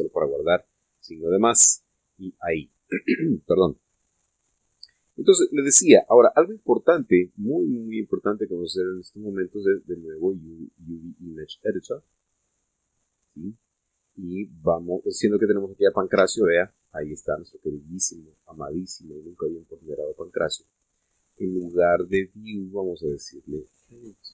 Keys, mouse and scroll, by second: 0.4 ctrl+shift+s, 1.8 KP_Add, 2.3 KP_Enter, 4.6-5.0 scroll down 2, 5.4-5.8 scroll up 2, 6.0 click, 6.9 middle click, 8.0 click, 12.7 click, 13.8-14.9 drag, 17.0 Tab, 23.2 click.